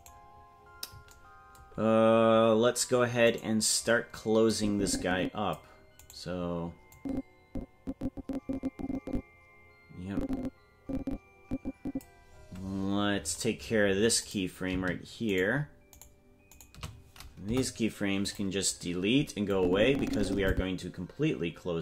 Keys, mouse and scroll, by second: 0.0 right click, 3.3-4.5 right drag, 4.5-5.5 drag, 6.1 right click, 6.9-12.0 drag, 12.3-13.3 scroll up 18, 14.3 right click, 15.3 shift+right click, 15.9 shift+right click, 17.4 Delete, 19.5-20.5 drag.